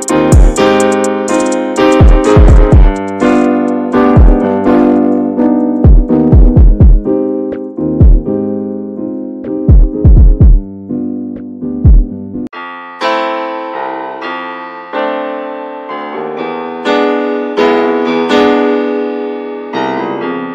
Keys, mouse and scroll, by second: 0.8 middle click, 1.2 Tab, 1.6 alt+z, 1.9 middle click, 2.9-3.2 scroll up 2, 3.2 click, 4.5 shift+click, 5.3 alt+z, 6.2 click, 7.6 alt+z, 7.9 alt+middle click, 8.2-8.8 scroll down 2, 9.1 click, 10.6 ctrl+click, 11.0 middle click, 11.8 alt+z, 12.1 shift+middle click, 12.3-12.9 scroll up 1, 12.9 shift+click, 13.1 shift+click, 13.8 x, 13.9 scroll down 2, 14.1-15.3 middle drag, 15.3 scroll up 1, 15.4 scroll down 2, 15.6-18.0 middle drag, 18.0 2, 18.3 click, 18.9 alt+shift+click, 20.3 ctrl+z.